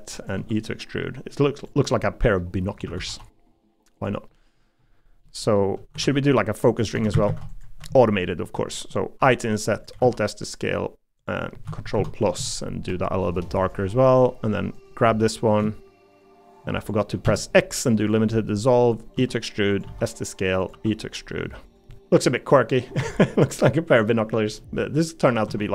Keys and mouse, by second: 0.3 e, 2.0 middle click, 2.8 a, 3.1 g, 4.3 middle click, 5.2 middle click, 6.0 ctrl+r, 6.9 3, 7.1 a, 7.2 a, 9.2 i, 10.0 alt+s, 11.9 ctrl+KP_Add, 12.9 g, 13.9 middle click, 15.2 middle click, 18.4 middle click, 19.1 e, 19.8 s, 20.7 e, 22.2 middle click, 23.0 Tab, 23.3 middle click, 24.6 middle click, 25.0 middle click.